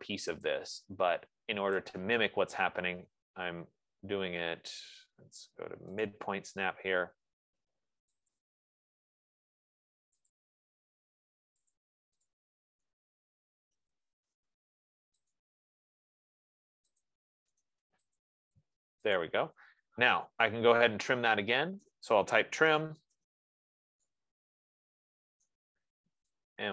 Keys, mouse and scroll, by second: 0.7 click, 2.3 click, 3.5-4.3 scroll, 6.7 click, 8.9 click, 9.5-9.8 scroll, 10.7 click, 12.3 click, 12.7 click, 13.5-15.2 typing, 15.7 click, 17.3 click, 17.9 right click, 18.6 click, 19.4 click, 20.5-21.1 scroll, 22.4 right click, 23.1-23.5 typing, 25.8 right click.